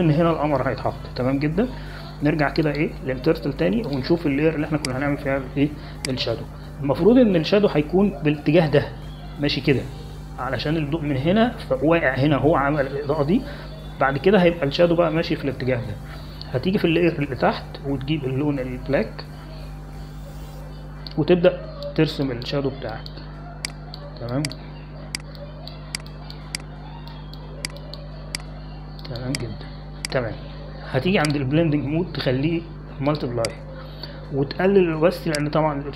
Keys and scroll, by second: 7.9-8.9 typing, 20.7 x.